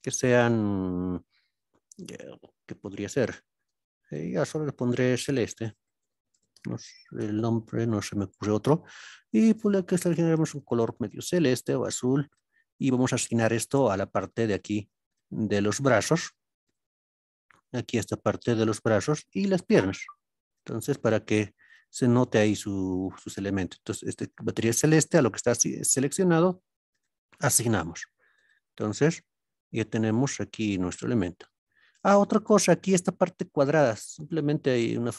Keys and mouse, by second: 0.0-7.3 drag, 4.2 BackSpace, 14.5 alt+click, 15.6 shift+click, 17.8 shift+drag, 24.2 click, 26.9 click, 29.2-30.8 middle drag, 29.2 a, 32.0 shift+middle click.